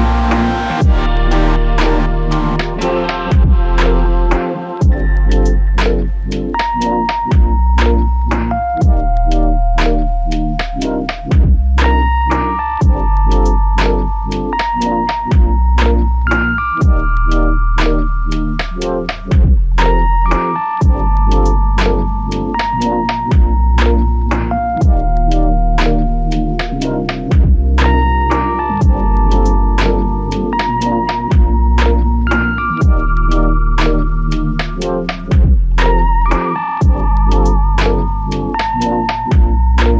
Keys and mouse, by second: 0.7 double click, 9.9 double click, 20.5 ctrl+alt+click, 23.5 f, 24.6 double click, 30.3 double click, 37.1 f.